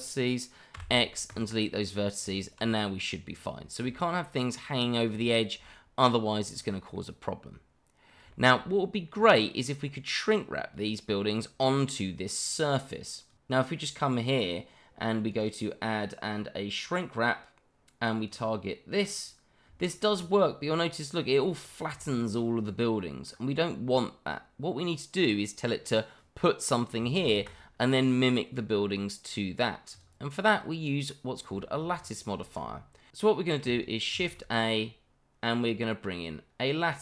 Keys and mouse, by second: 0.7 x, 2.2 Tab, 3.9 shift+middle drag, 4.9 shift+middle drag, 5.6-6.0 shift+middle drag, 6.5 click, 6.9-8.1 middle drag, 8.3 shift+middle drag, 9.1 click, 9.5 middle click, 11.3-12.5 middle drag, 13.3 click, 14.2 middle drag, 17.6 click, 18.2 click, 19.0 click, 19.8 shift+middle drag, 20.7-21.4 shift+middle drag, 22.0-22.4 shift+middle drag, 22.6-23.3 middle drag, 27.2 ctrl+z, 28.3-29.2 middle drag, 29.9 click, 30.4-31.0 middle drag, 31.2 shift+middle click, 31.7 shift+middle drag, 32.4 click, 32.7-33.1 middle drag, 34.1 shift+a.